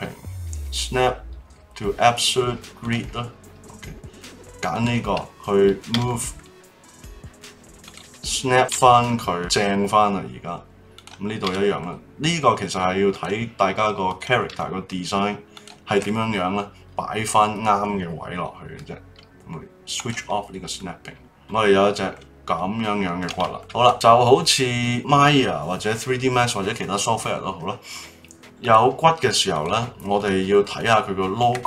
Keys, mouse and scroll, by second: 4.7 click, 5.9 g, 8.5 click, 8.7 g, 10.9 click, 11.4 g, 14.0 click, 14.5 g, 19.9 click, 20.7-22.5 middle drag, 22.5-22.9 scroll down 4, 22.9-23.5 scroll up 3, 23.5 shift+middle click, 24.0-25.8 middle drag, 28.6 click, 29.5 click, 30.2 click, 30.7 click.